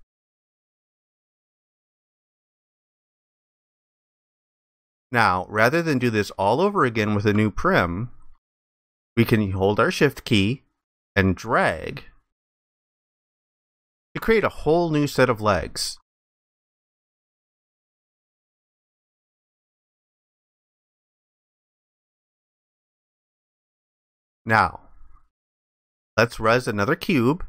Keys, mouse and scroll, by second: 2.6 alt+click, 4.2 alt+click, 7.8 alt+click, 11.5 shift+click, 15.3 alt+click, 20.4 alt+click, 23.3 ctrl+alt+click.